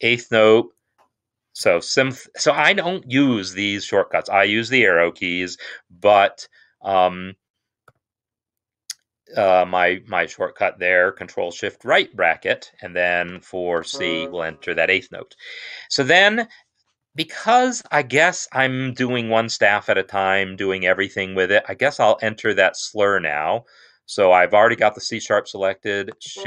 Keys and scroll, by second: 0.7 typing, 7.6 ctrl+shift+], 13.6 typing, 17.0 Escape.